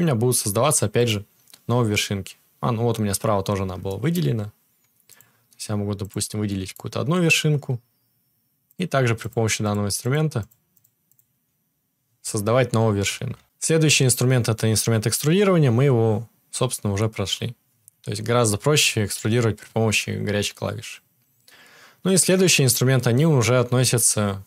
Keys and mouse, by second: 6.1-8.7 shift+middle drag, 8.7-24.4 drag, 13.1 ctrl+z, 13.7-14.1 ctrl+z.